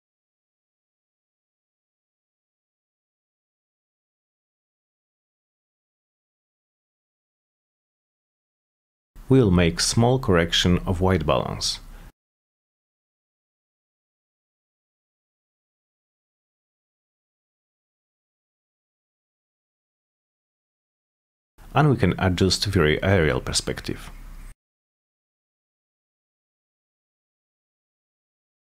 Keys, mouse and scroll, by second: 0.0 click, 0.4 1, 1.8 1, 2.3 Return, 4.3 click, 6.2 click, 6.7 click, 7.3 click, 9.8 click, 10.3 5, 10.9 Return, 15.3 click, 15.9-16.3 drag, 19.6 click, 20.0 click, 20.9 click, 21.4 8, 22.5 click, 23.4 click, 24.7 Return, 26.7 click, 27.1 click, 28.5 click.